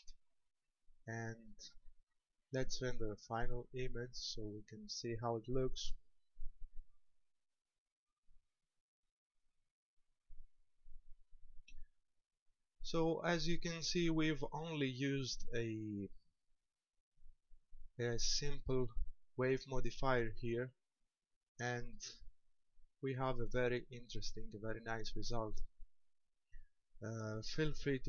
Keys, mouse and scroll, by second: 1.4 scroll up 4, 2.2-3.7 scroll up 1, 4.1 click.